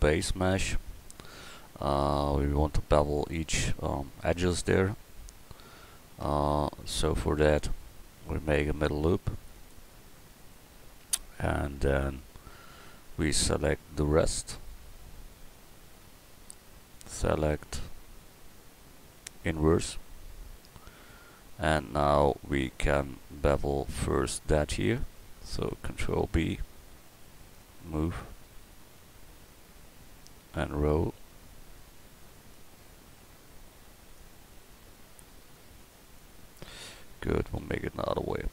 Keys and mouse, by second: 6.3 Tab, 8.7 ctrl+r, 26.0 ctrl+b, 34.0-35.4 middle drag, 37.6 a.